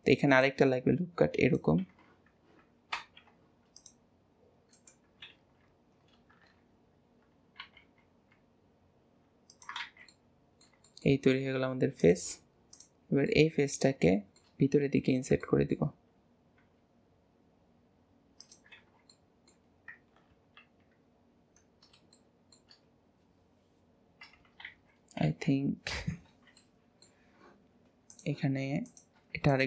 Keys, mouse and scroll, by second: 3.0 ctrl+r, 5.3 alt+z, 6.4 KP_3, 7.6 g, 9.8 alt+z, 10.0-12.0 middle drag, 12.0 click, 12.7 click, 13.2-14.6 middle drag, 14.6-15.4 scroll up 3, 15.4 shift+middle click, 15.9-16.6 scroll up 1, 16.6 e, 18.7 alt+z, 19.0-20.3 middle drag, 20.3 KP_3, 21.7-22.1 scroll down 4, 22.1-24.6 shift+middle drag, 24.6 ctrl+z, 25.2 ctrl+z, 26.2 alt+z, 26.6-28.1 middle drag, 28.1 click, 28.8 click, 29.4 alt+shift+click.